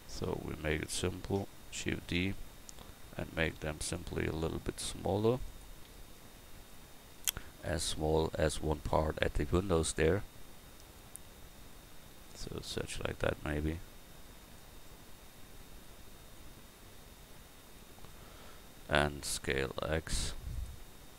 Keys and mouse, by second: 0.8-2.0 right drag, 2.0 shift+d, 2.7-4.0 drag, 4.5 s, 11.4 s, 13.1-14.6 drag, 16.4-17.8 drag, 19.2 s.